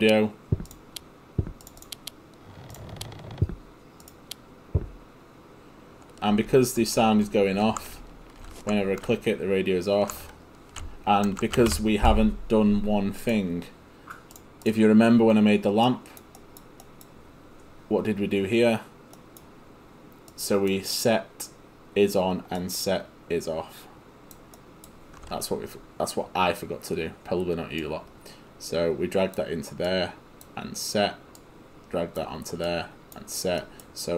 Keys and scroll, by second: 6.3 ctrl+a, 6.5 ctrl+s, 7.7 ctrl+d, 8.0 w, 8.5 ctrl+w, 10.8 s, 11.3 ctrl+s, 11.7 Escape.